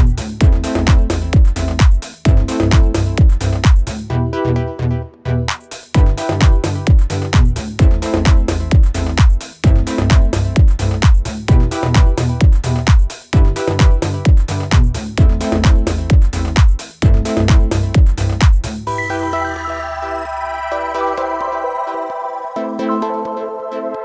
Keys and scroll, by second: 10.6 ctrl+-, 10.7 ctrl+-.